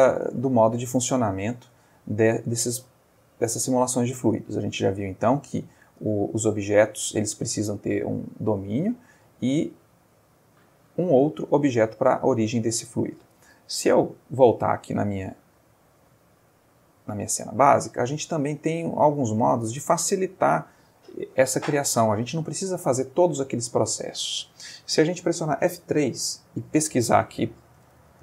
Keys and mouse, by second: 0.4-2.8 middle drag, 3.6 click, 5.1 middle click, 6.1 click, 6.4 x, 6.9 click, 8.3 middle click, 10.1 click, 10.9-12.9 middle drag, 14.2 click, 15.4 click, 16.6 click, 17.6-18.6 ctrl+middle drag, 18.7-19.4 ctrl+middle drag, 21.4 middle click, 25.7 F3, 27.7-28.2 typing.